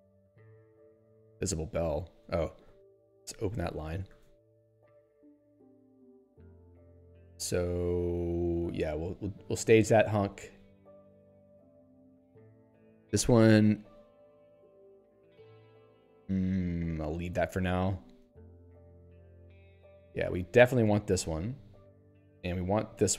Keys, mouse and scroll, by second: 0.9 Return, 2.7 ctrl+o, 3.3 ctrl+s, 4.6 ctrl+alt+;, 6.3 p, 10.1 s, 10.6 n, 11.8 p, 16.6 n, 21.4 s.